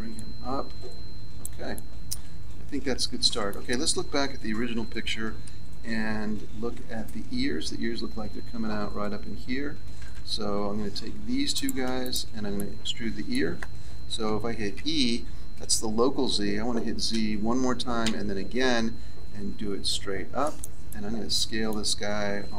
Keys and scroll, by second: 4.1 z, 5.4 KP_3, 10.0 z, 14.7 e, 22.3 s.